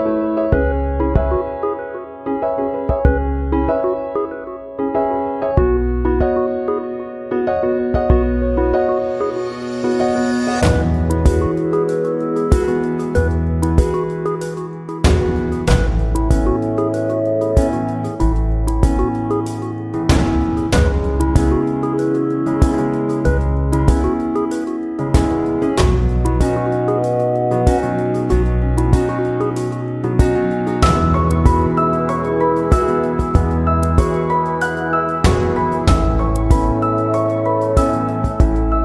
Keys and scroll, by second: 8.4 ctrl+=, 30.3 ctrl+0.